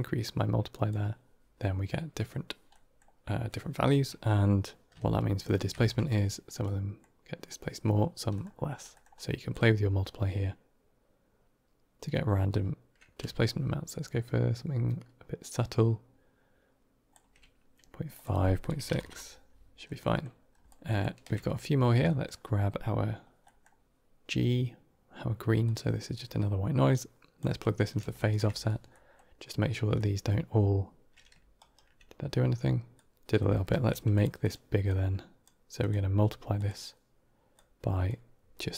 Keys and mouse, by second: 2.6 middle click, 4.0 middle click, 5.3 ctrl+shift+click, 5.7 middle drag, 6.5 middle click, 8.2 middle click, 8.8 middle click, 9.4-17.0 drag, 18.0-19.4 drag, 19.9 middle click, 20.8 ctrl+shift+click, 21.9 middle click, 23.3 middle drag, 25.5-27.3 drag, 28.0 ctrl+shift+click, 28.8 middle drag, 29.8 middle drag, 32.8-33.1 drag, 33.3 middle click, 33.6 q, 34.7-35.3 drag, 35.7-36.5 drag, 37.4 click.